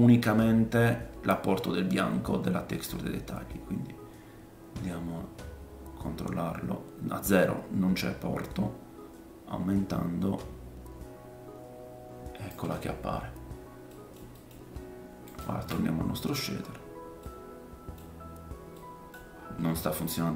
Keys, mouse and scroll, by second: 12.8-13.9 scroll down 5, 13.9-15.4 middle drag, 15.4-18.3 ctrl+shift+drag, 17.2 middle click, 18.3-20.3 middle drag, 19.3-20.3 scroll up 4.